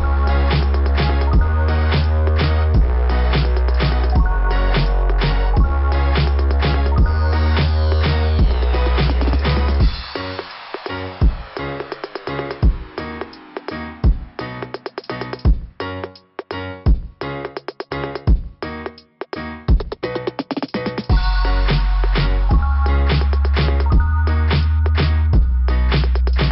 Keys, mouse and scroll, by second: 1.8 click, 5.4 click, 7.3 click, 9.7 click, 10.3 click, 12.2 click, 12.5 click, 12.6 click, 14.4 click, 14.5 click, 14.6 click, 14.8 click, 15.0 click, 15.1 click, 15.4 click, 17.2 click, 17.4 click, 18.0 click, 18.1 click, 18.7 click, 18.7 click, 22.0 scroll up 2, 23.8 click, 25.3 scroll down 2, 26.4 click.